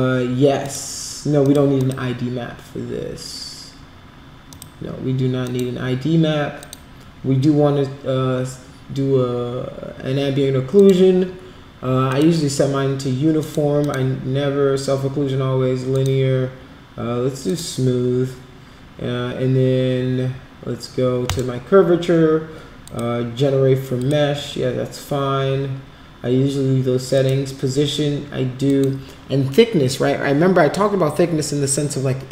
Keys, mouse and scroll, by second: 0.6 click, 1.4 click, 1.8 click, 4.5 click, 5.4 click, 6.6 click, 10.7 click, 12.1 click, 13.4 click, 13.8 click, 15.9 click, 17.5 click, 21.2 click, 22.8 click, 24.0 click, 27.1 click, 28.6 click.